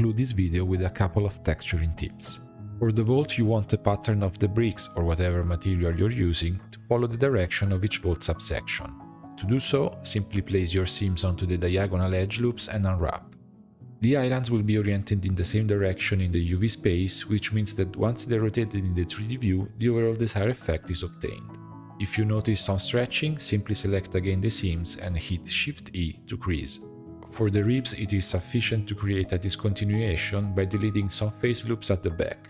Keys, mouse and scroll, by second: 1.5 click, 1.8 Tab, 2.2-3.4 middle drag, 3.4-3.7 scroll up 4, 3.7 2, 4.2 alt+click, 4.9 alt+shift+click, 5.4 alt+shift+click, 6.2 alt+shift+click, 6.8 ctrl+e, 8.4 a, 9.0 u, 10.5-10.9 scroll down 3, 10.9 middle click, 11.4-12.6 scroll up 1, 12.6 click, 14.8-16.1 middle drag, 16.1 s, 18.1 middle click, 19.0-19.8 scroll up 3, 19.8-21.1 shift+middle drag, 21.1 2, 21.8 alt+click, 22.2 shift+middle click, 23.1 alt+shift+click, 23.7 alt+shift+click, 24.1 alt+shift+click, 24.6-25.6 shift+middle drag, 25.6 shift+e, 27.1-28.2 middle drag, 28.2-28.5 scroll up 1, 28.5-32.1 middle drag, 32.1 a.